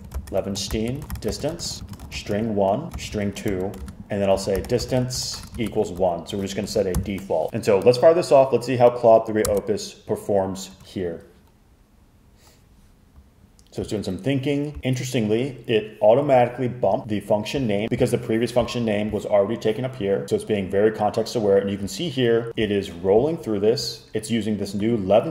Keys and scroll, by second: 0.0-7.0 typing, 9.5 Return.